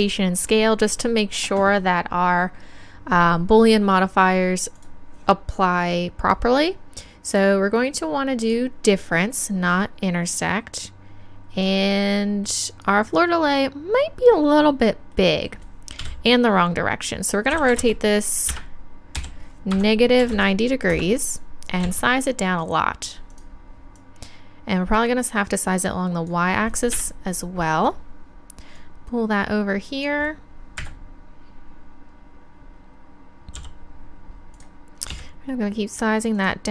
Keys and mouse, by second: 4.7 click, 12.7-16.0 right drag, 16.0 KP_3, 17.5 r, 21.8 s, 23.3-27.3 drag, 26.9 KP_1, 30.1 click, 30.7 middle click, 30.8 KP_Decimal, 33.5 g, 34.6-36.7 drag, 35.1 s.